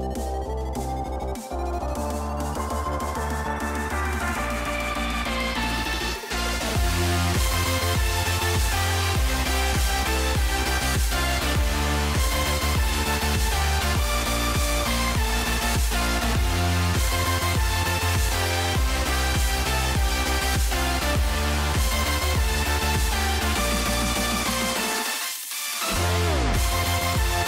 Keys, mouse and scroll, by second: 2.0 click, 3.6 click, 3.6 right click, 5.9 alt+click, 6.5 alt+right click, 7.2 shift+middle click, 8.3 alt+click, 9.7 shift+middle click, 10.4 shift+middle click, 11.0 right click, 12.2 g, 15.4 click, 17.0 g, 19.9 middle click, 21.3 a, 21.6 s, 26.6 click.